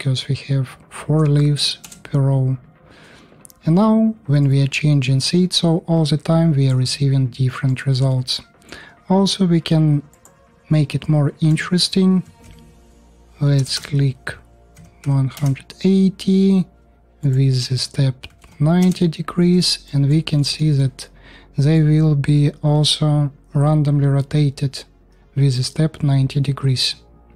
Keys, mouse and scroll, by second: 13.5 BackSpace.